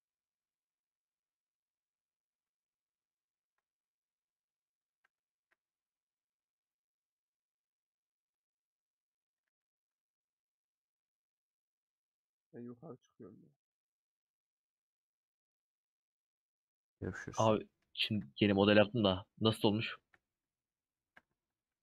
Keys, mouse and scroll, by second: 1.3 alt+click, 3.5 alt+click, 4.6 click, 6.9-8.5 middle drag, 8.5 click, 8.8 middle click, 9.4 a, 10.6 middle click, 11.4 Tab, 13.8 Tab, 15.7 Tab, 16.2-18.6 middle drag, 18.6 /, 19.6 Tab, 19.9 Tab.